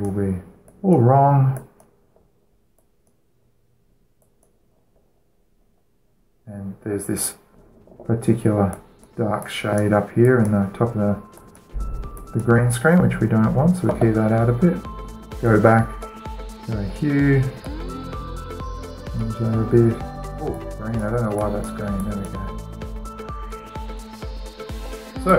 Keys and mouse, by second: 0.0 middle click, 0.4-6.7 drag, 6.8-8.2 middle drag, 9.3-14.8 drag, 15.9-17.6 right drag, 17.6-18.3 middle drag, 18.3-25.3 drag.